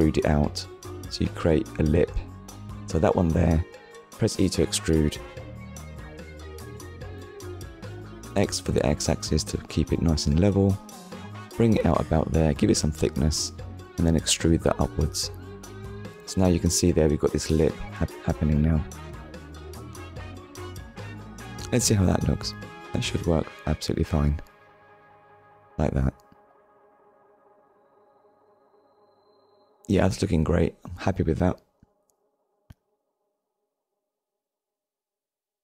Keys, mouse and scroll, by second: 0.4 shift+middle click, 1.2 scroll up 1, 2.0 click, 12.7 click, 19.4 ctrl+click, 21.5 click, 25.8 click, 26.3 scroll down 1, 26.6-27.0 scroll up 1, 27.0 click, 27.3-27.8 scroll down 2, 27.8 shift+middle click, 28.6 middle click, 31.1 scroll down 1, 31.9-32.6 scroll down 1, 32.8 shift+middle click, 33.7 middle click.